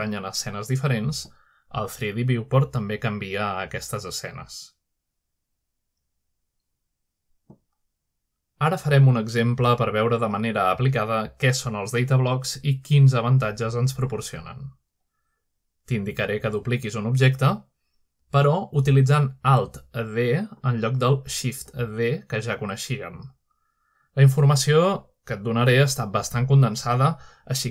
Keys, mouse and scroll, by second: 0.0-1.7 scroll down 1, 1.7 click, 3.0-4.8 scroll down 2, 4.8-5.5 middle drag, 5.4-7.6 scroll down 1, 7.6-8.5 drag, 8.7 click, 9.9-10.7 scroll down 1, 10.7-13.6 scroll up 1, 13.6-19.1 drag, 14.4-16.9 scroll down 1, 16.9-18.1 scroll down 1, 18.1-18.9 scroll down 1, 18.9 scroll down 1, 19.4-20.3 shift+middle drag, 22.4-23.3 middle drag, 24.5-25.5 middle drag, 25.1-27.7 scroll up 1.